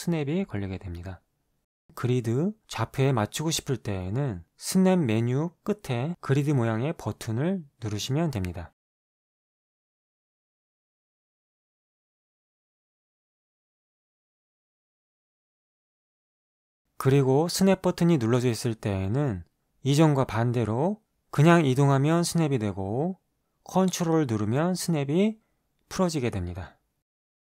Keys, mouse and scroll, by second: 1.4 Return, 1.4 KP_Decimal, 1.4 KP_5, 4.0 click, 8.7-9.4 ctrl+drag, 13.5-15.9 ctrl+drag, 18.7 click, 21.0-24.0 drag, 24.9-27.5 ctrl+drag.